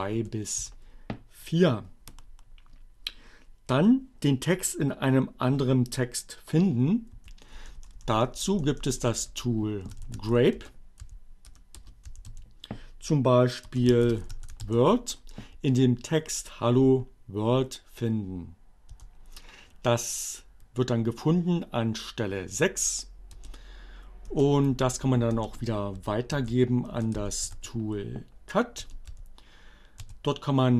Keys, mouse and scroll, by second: 0.0-0.3 typing, 7.2 Up, 7.4 BackSpace, 9.5-10.6 typing, 11.6 space, 12.3 b, 12.6 space, 12.8 shift+w, 14.0-15.2 typing, 17.6 Return, 22.9 BackSpace, 24.8 Up, 25.0 space, 25.3 alt+<, 26.5 alt+space, 27.2-28.9 typing, 30.1 d.